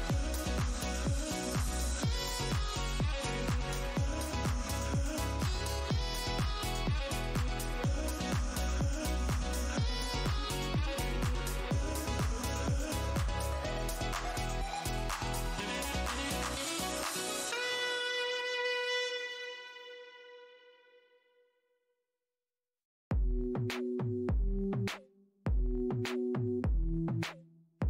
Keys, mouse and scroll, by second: 0.3 alt+click, 0.4 alt+click, 0.9 alt+Tab, 1.1 alt+click, 1.4 alt+Tab, 1.6-2.0 alt+scroll up 1, 2.7 Tab, 2.9 click, 4.2 Tab, 4.3 alt+click, 4.6-5.2 alt+scroll down 1, 5.3 alt+click, 5.6 alt+scroll down 1, 5.6 shift+d, 6.1 shift+Tab, 6.8-7.6 alt+scroll down 1, 7.6 click, 7.9-8.3 scroll down 1, 8.6 alt+click, 9.0 Tab, 12.4 scroll down 1, 14.6-15.3 scroll down 1, 25.0-25.3 scroll up 1, 26.3 click.